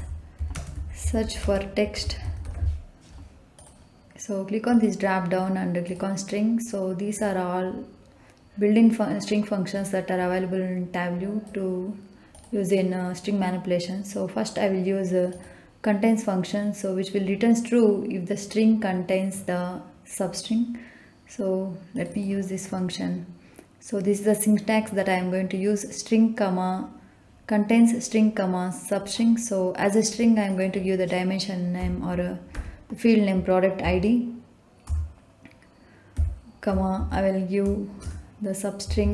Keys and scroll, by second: 0.0-2.4 typing, 31.8 p, 32.5 r, 33.8 Down, 34.8 Return, 36.1 ', 36.9 shift+', 37.9 BackSpace, 38.8 '.